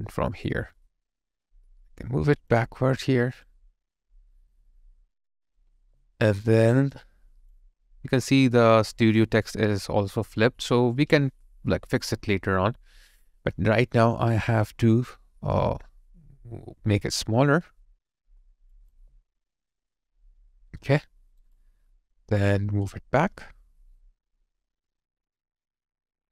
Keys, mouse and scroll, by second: 5.9 alt+right click, 6.9 alt+click, 18.9 alt+click, 20.8 alt+right click.